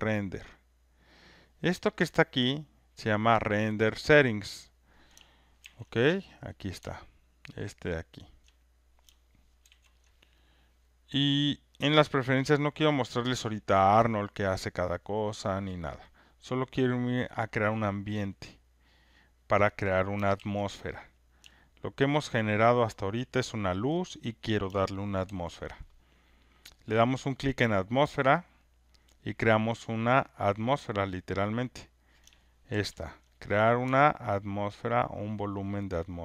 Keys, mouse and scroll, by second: 4.1 click, 5.6 ctrl+F1, 6.3 click, 8.3 click, 9.6 ctrl+F1, 13.4 click, 17.6 click, 20.3 ctrl+F1, 21.0 click, 23.7 ctrl+click, 25.2 ctrl+F1, 26.1 click, 28.3 click, 32.7 ctrl+F1, 33.4 click.